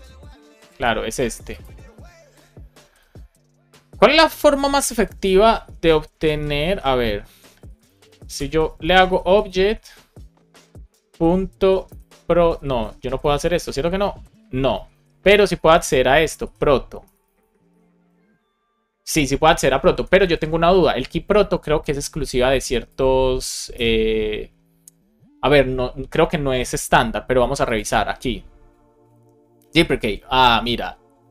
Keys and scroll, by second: 0.7 super+z, 5.9 Return, 7.2 Up, 7.9 space, 8.2 super+Right, 8.6 Return, 14.8 alt+shift+Left, 15.1 BackSpace, 15.5 shift+-, 16.9 BackSpace, 17.4 shift+-, 19.9 alt+shift+Left, 20.9 shift+Right, 21.3 super+c, 23.3 super+v, 23.6 Return.